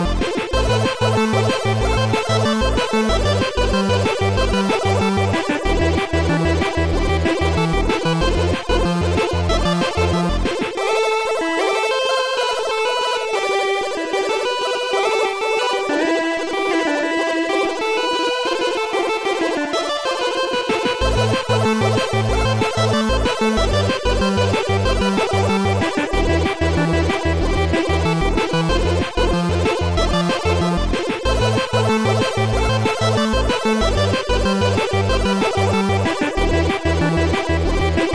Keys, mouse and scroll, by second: 0.0 shift+click, 0.8 shift+click, 1.8 shift+click, 2.9 shift+click, 4.5 shift+click, 5.7 Delete, 7.0 Delete, 7.0 click, 8.1 click, 9.0 click, 12.1 Delete, 12.1 click, 15.1 click, 20.7 Return, 23.1 ctrl+z, 24.3 ctrl+z, 24.3 Return, 24.3 click, 24.9 click, 25.9 click, 29.2 click, 29.6 click, 30.1 click, 32.4 Return, 35.4 click.